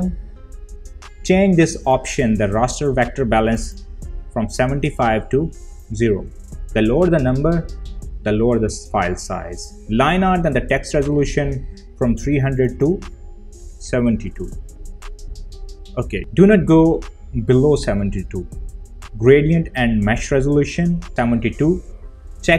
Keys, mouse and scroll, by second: 1.9-8.5 drag, 12.7 click, 19.2 click, 19.3 click.